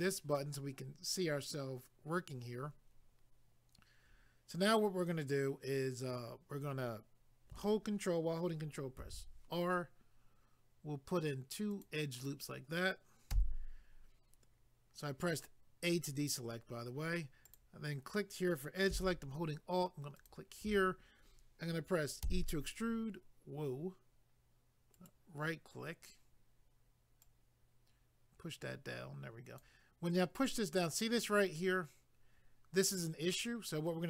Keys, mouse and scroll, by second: 9.0 ctrl+r, 10.1 scroll up 1, 11.7 click, 12.2 click, 13.3 a, 17.5 click, 20.2 alt+click, 24.9 right click, 27.2 click, 30.5 click.